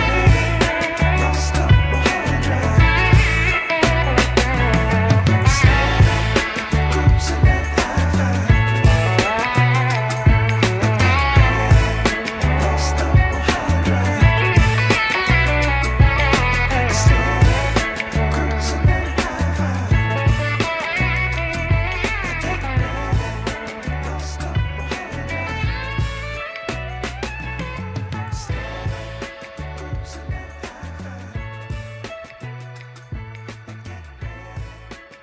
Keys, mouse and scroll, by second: 0.3-0.7 scroll up 3, 0.9 shift+middle click, 1.6-2.0 scroll down 1, 2.3-3.3 drag, 2.5 right click, 4.5 s, 10.2 g, 14.2 click, 14.7 scroll down 1, 15.0 shift+middle click, 15.5 Tab, 16.3 Tab, 17.2 alt+click, 18.0 ctrl+b, 25.4 ctrl+z, 26.5 click, 27.6 g, 30.0 alt+click, 30.9 ctrl+b, 33.9 Tab, 35.1 drag.